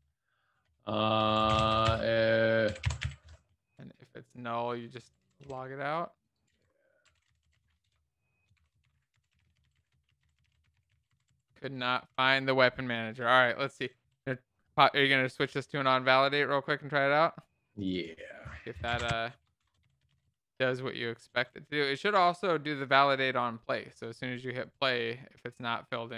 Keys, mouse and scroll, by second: 2.2-3.5 typing, 3.7 Return, 4.5-13.3 typing, 5.7 Right, 6.0 Return, 13.6 alt+shift+f, 13.9 ctrl+s, 18.8-20.9 typing, 21.2 Return, 21.8 alt+shift+f, 22.3 ctrl+s, 22.3 Down, 23.2 ctrl+s, 23.4 Up, 23.8 shift+Delete, 24.2 alt+shift+f, 24.6 ctrl+s, 24.6 Down.